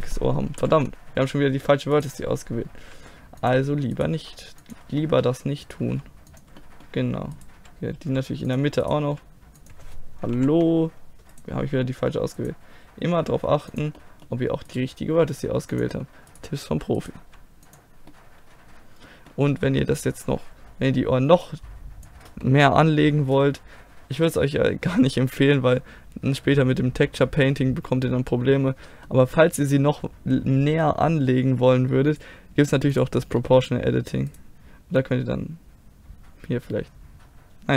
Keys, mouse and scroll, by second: 0.6 ctrl+z, 1.9-3.8 right drag, 2.8 g, 4.0-5.0 right drag, 4.2 g, 5.0 click, 5.9 g, 8.0 g, 9.1 g, 10.3 ctrl+z, 11.3-12.8 right drag, 12.8 middle click, 13.2 g, 13.7-14.7 drag, 14.7 right click, 15.1 g, 15.5 click, 17.2 g, 17.9 click, 18.3 middle click, 21.4-23.2 drag, 23.2 middle click, 24.3-25.5 middle drag, 26.1-27.4 middle drag, 27.7 middle click, 29.7-32.1 middle drag, 33.4 click, 34.0 middle click, 34.3-37.4 drag, 35.0-36.1 right drag, 36.1 middle click.